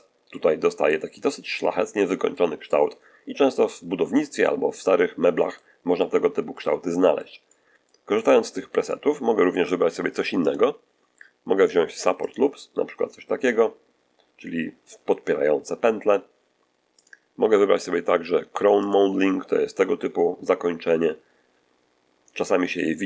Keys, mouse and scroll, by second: 0.2 shift+middle click, 1.1-2.4 shift+middle drag, 2.5-4.2 middle drag, 4.6-5.7 middle drag, 5.9-7.3 middle drag, 7.4 middle click, 8.0 middle click, 8.7 middle click, 10.3 click, 12.1 click, 13.3-15.9 middle drag, 16.9 click, 18.7 click, 19.7-23.0 middle drag.